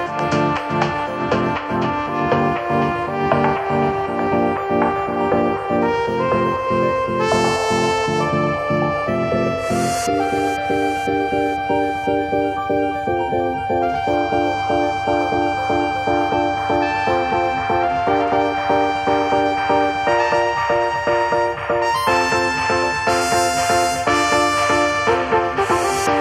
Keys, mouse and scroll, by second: 13.5-13.8 scroll down 3, 13.7 shift+middle click, 16.6 scroll up 2, 17.6 shift+middle click, 19.0 shift+middle click, 19.4 scroll down 1, 23.2 scroll up 1, 23.4 shift+middle click, 23.8 scroll up 2, 24.1 shift+middle click, 25.3 click.